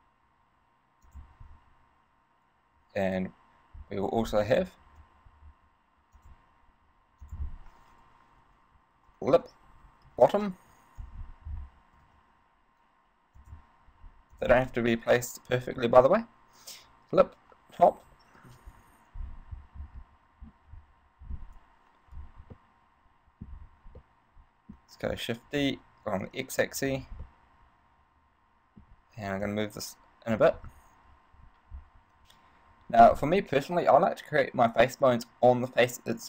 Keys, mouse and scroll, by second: 0.0 g, 1.4 click, 4.4 scroll up 4, 5.1 shift+d, 6.5 click, 7.5 click, 12.2 shift+d, 13.7 click, 14.5 click, 20.2-22.3 scroll down 3, 22.8 middle click, 23.3 middle click, 23.7 scroll up 3, 24.3 middle click, 25.7 shift+d, 27.2 click, 27.5 middle click, 29.6 click.